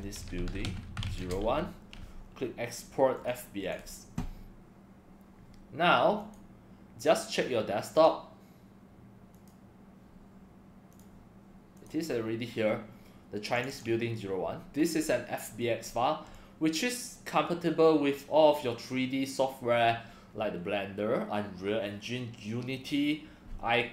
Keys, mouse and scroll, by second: 0.0-2.0 typing, 3.1 click, 3.6 click, 6.2 click, 7.9 click, 9.3 click, 10.9 click, 11.7 click, 13.5 click, 13.7 click, 16.3-17.3 drag.